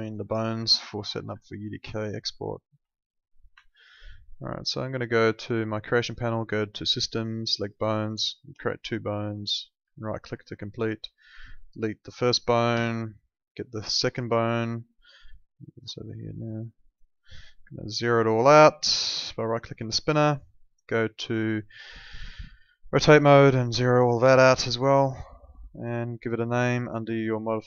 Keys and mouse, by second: 0.8 alt+middle click, 1.4 alt+middle click, 3.6 alt+middle click, 5.4 click, 9.4 right click, 9.9 alt+middle click, 10.7 w, 11.3 click, 11.9 middle click, 12.7 Delete, 13.2 click, 13.8 middle click, 15.5 click, 18.0 right click, 19.8 middle click, 22.7 click, 24.3 right click, 25.1 middle click, 26.8 click.